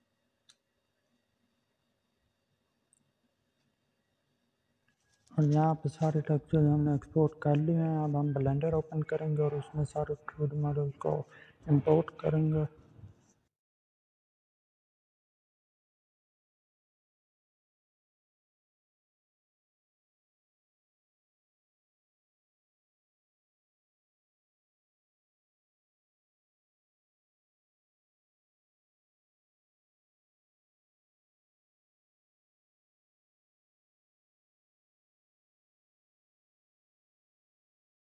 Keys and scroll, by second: 22.7 Delete.